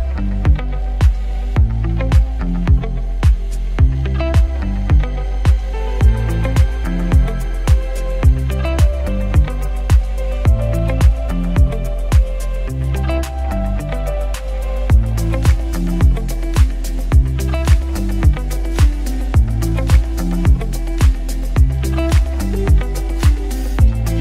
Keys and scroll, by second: 6.4-7.3 typing, 9.8 f, 10.8 space, 11.3 ctrl+v, 12.2 ctrl+t, 21.9 alt+shift+c, 23.0 Return.